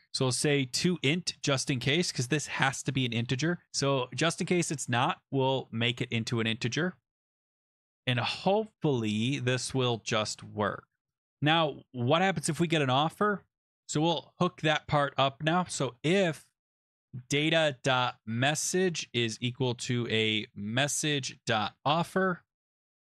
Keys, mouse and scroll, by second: 0.0-3.9 typing, 5.5 click, 7.8 click, 10.1 click, 11.3 click, 11.6 click, 12.2 click, 12.6 click, 13.1 click, 13.6 Return, 13.9 shift+Tab, 14.1 shift+Tab, 15.4-23.0 typing, 22.6 Tab.